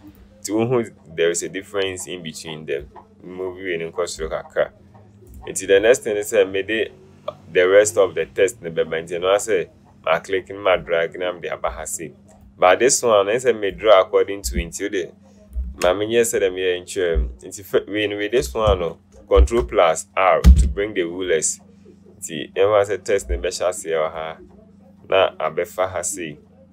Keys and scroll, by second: 15.8 Delete, 19.5 ctrl+r.